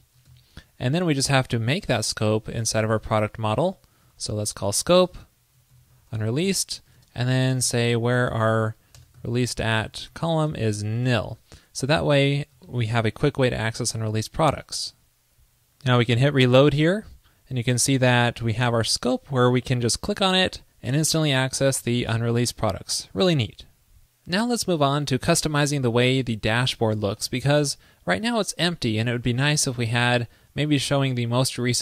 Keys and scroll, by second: 0.4 super+s, 4.2 super+Return, 10.6 ctrl+l, 11.0 super+s, 12.8 alt+super+Left, 16.5 super+r.